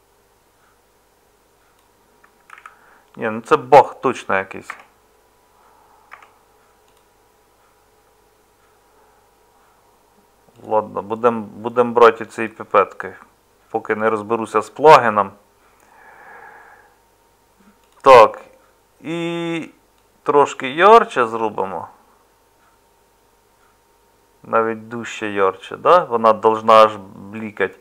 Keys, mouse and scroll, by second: 2.5 ctrl+z, 4.7 Tab, 6.1 Tab.